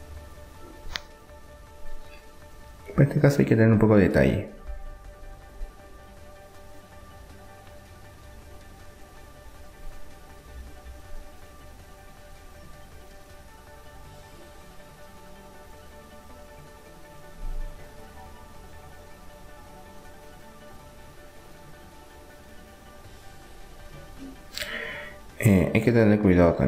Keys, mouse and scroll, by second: 2.6 e, 6.1 r, 10.8-12.7 drag, 12.3 middle click, 12.7 middle click, 14.6 e, 17.7 r, 19.3-21.3 drag, 23.3 s, 26.3 s.